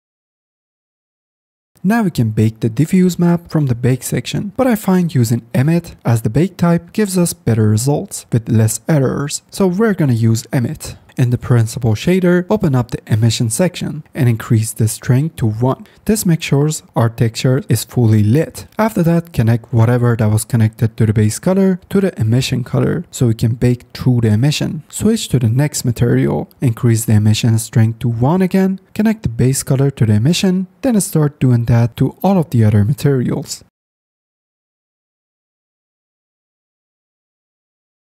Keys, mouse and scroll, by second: 11.2 middle click, 11.7 drag, 12.4 middle click, 14.1 click, 14.9 click, 21.0-22.4 drag, 26.5 click, 26.8 click, 27.7 click, 28.1 click, 29.7-30.8 drag, 31.6 click, 32.3-32.6 drag.